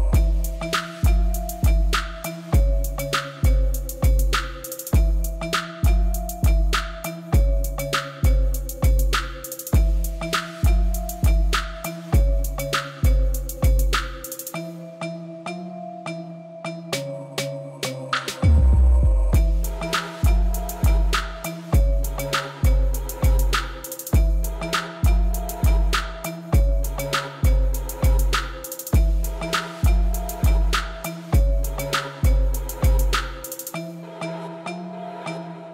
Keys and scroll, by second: 11.1 space, 16.4 space, 27.7 Tab, 35.0 2, 35.3 Return.